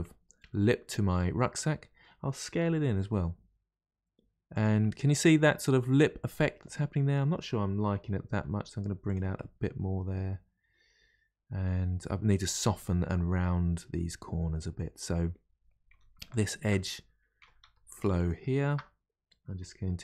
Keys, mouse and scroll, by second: 0.1-0.5 scroll down 1, 0.5-2.5 middle drag, 2.5 s, 4.8-7.9 middle drag, 8.3 g, 9.3-12.5 middle drag, 13.0-14.0 scroll up 2, 14.0-15.9 middle drag, 15.9 3, 16.3 alt+click, 17.4 3, 17.5 2, 18.1 alt+click.